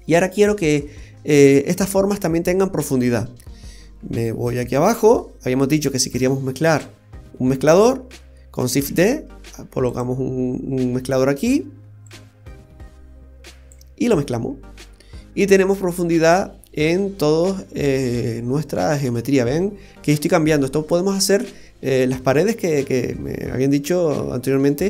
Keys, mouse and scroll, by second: 1.3-2.6 scroll down 1, 2.7-4.7 scroll down 15, 4.5 middle click, 6.2 click, 7.7 click, 8.9 shift+d, 12.0 click, 15.3-15.6 scroll up 1, 15.6 middle click, 20.8-21.3 scroll down 1, 21.3 middle click, 21.3-22.1 scroll down 1.